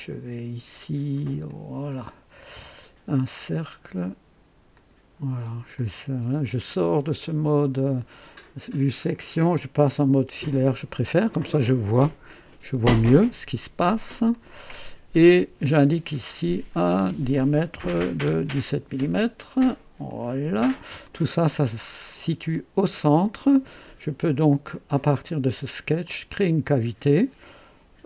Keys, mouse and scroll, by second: 1.4 click, 2.5 scroll up 2, 4.7 click, 5.7 click, 8.7 click, 10.2 &, 13.2 right click, 14.3 click, 16.0 click, 17.7 KP_1, 17.9 KP_7, 18.2 KP_Enter, 20.0 click, 21.0-22.4 drag, 22.5-23.5 drag, 26.0 click.